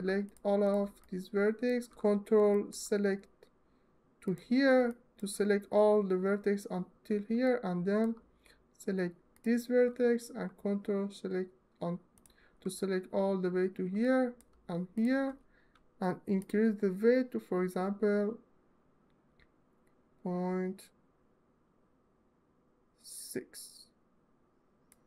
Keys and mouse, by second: 0.0 shift+middle click, 0.8 alt+middle click, 1.1 alt+click, 4.6-4.9 alt+middle drag, 7.3-7.7 alt+middle drag, 9.0 shift+middle click, 16.2-24.6 middle drag.